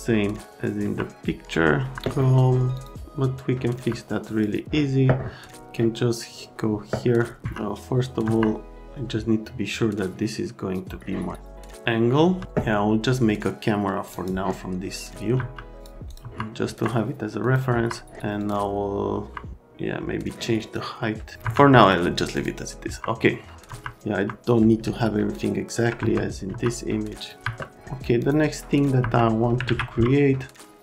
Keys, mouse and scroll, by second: 0.7 F3, 1.8 F3, 2.7 click, 3.6 F3, 4.3 click, 7.4 F3, 8.2 F3, 8.8 middle click, 12.2 F3, 14.1 click, 15.3 F3, 15.8 click, 16.1 click, 16.2 F3, 16.7 F3, 17.4 click, 17.7 F3, 18.4 click, 19.1 F3, 20.7 click, 21.4 F3, 22.3 click, 22.9 F3, 23.6 F3, 24.1 F3, 24.9 alt+Scroll_Lock, 26.0 F3, 26.5 F3, 27.4 F3, 28.2 click, 28.7 click, 29.0 F3, 29.6 alt+q.